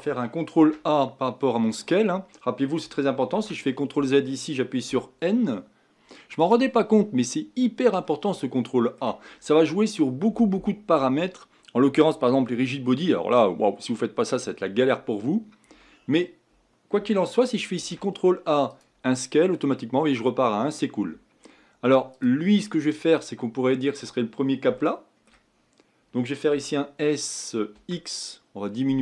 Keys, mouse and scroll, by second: 0.5 ctrl+a, 3.3 ctrl+z, 4.9 n, 6.4 click, 8.0-17.8 middle drag, 17.8 ctrl+a, 22.1 click, 22.5 middle click, 23.1-24.8 scroll up 5, 24.8 shift+middle click, 25.5-26.5 scroll up 2, 26.5 s.